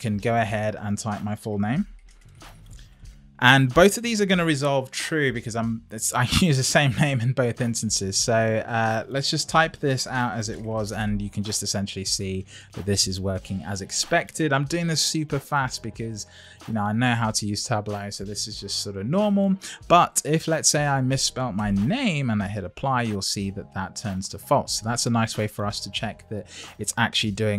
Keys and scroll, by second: 0.5 Left, 1.5 shift+t, 2.3 shift+n.